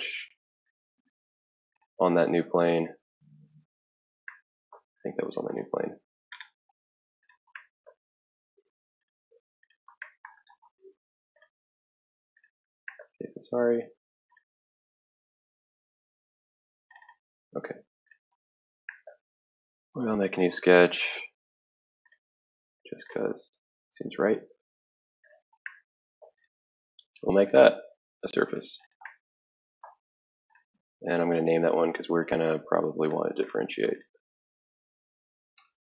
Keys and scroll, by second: 35.3-35.8 typing.